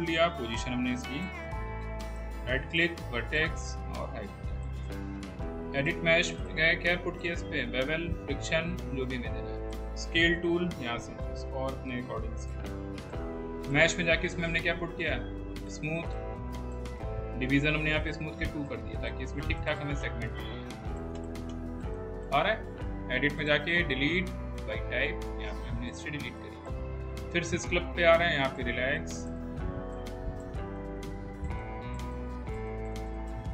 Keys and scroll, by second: 10.0 r, 13.2 w.